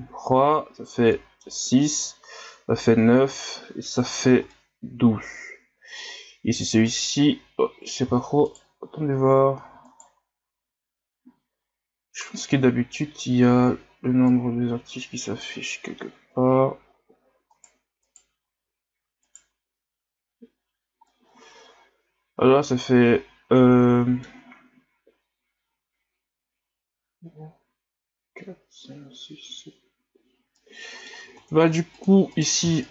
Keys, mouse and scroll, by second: 6.9 right click, 8.5 alt+right click, 9.9 alt+right click, 14.3-17.5 drag, 17.5 right click, 18.0 right click, 19.2 alt+right click, 21.1-24.1 middle drag, 30.5-31.3 middle drag, 31.3 ctrl+Tab, 32.3 right click, 32.8 shift+right drag.